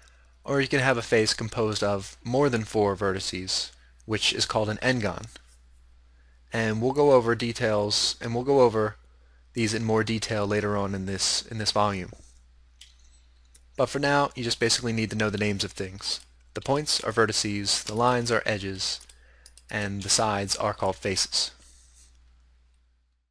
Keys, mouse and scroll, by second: 16.2-16.9 right drag, 16.7 g.